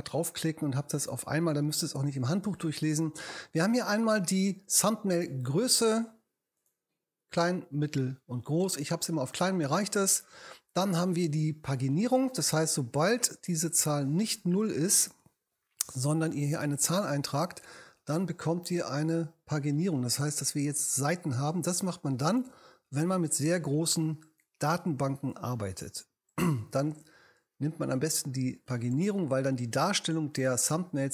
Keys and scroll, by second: 16.0 3, 16.5 0.